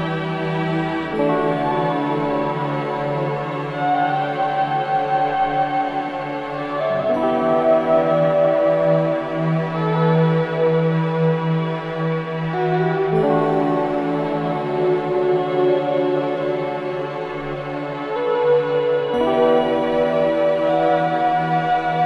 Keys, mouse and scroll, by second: 0.2-0.5 scroll up 1, 2.0 click, 5.7 right click, 6.2 scroll up 1, 7.4-10.8 drag, 10.8-11.2 scroll up 1, 11.9-12.9 typing, 14.0 click, 15.5 scroll down 1, 18.3 scroll up 1, 18.7 scroll down 1.